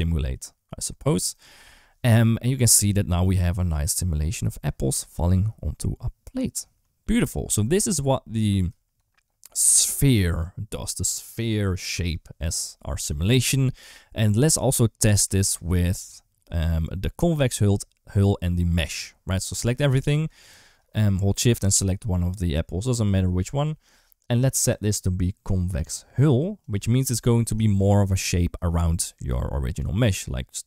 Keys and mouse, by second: 1.9 space, 7.6 space, 17.4-18.1 drag, 21.8 shift+click, 24.9-26.5 drag, 28.8 d, 29.1-30.6 drag.